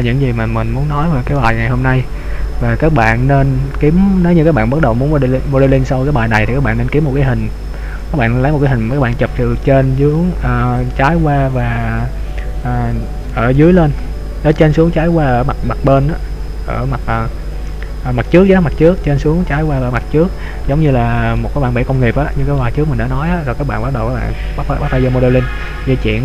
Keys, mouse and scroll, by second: 0.1-0.6 scroll down 1, 0.7-1.4 scroll down 1, 21.5 middle click.